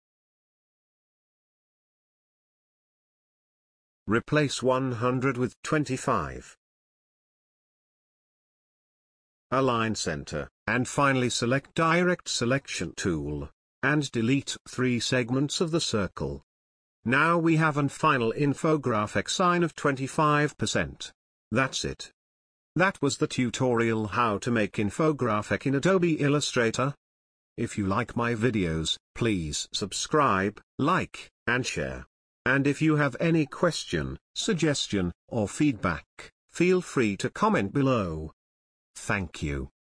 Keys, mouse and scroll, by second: 1.9 t, 2.9-7.5 drag, 7.5 BackSpace, 7.8-9.0 drag, 9.0 click, 9.6 Right, 10.4 click, 13.2 Delete, 13.7 click, 14.6 Delete, 14.8 click, 15.6 Delete, 16.3 click, 16.8 Delete, 18.1 click, 22.9 ctrl+space, 23.1 ctrl+click, 23.2-25.5 ctrl+drag, 24.6 click.